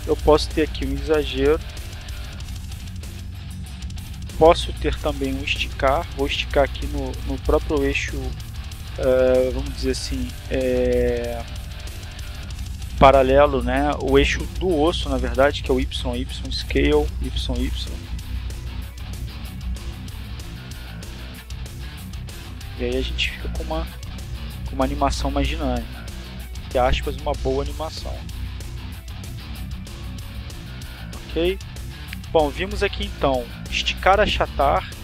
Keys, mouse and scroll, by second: 0.8 click, 2.2 right click, 14.1 s, 14.9 y, 17.1 click, 18.0-20.5 drag, 21.2 click, 21.8 click, 22.6 click, 24.3 click, 24.9 click, 25.7-27.4 drag, 28.8 click, 29.5 click, 30.3 click, 32.1 click, 32.9 click, 34.7 click.